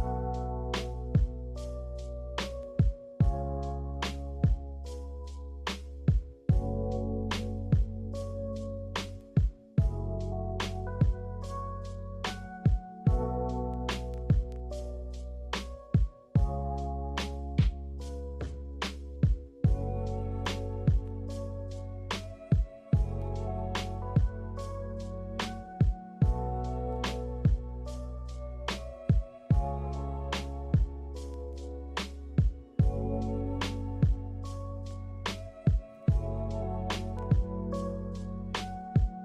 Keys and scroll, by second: 5.8 a, 17.4 a, 19.8-23.4 typing, 26.9 0, 28.9 ctrl+h, 33.7 z.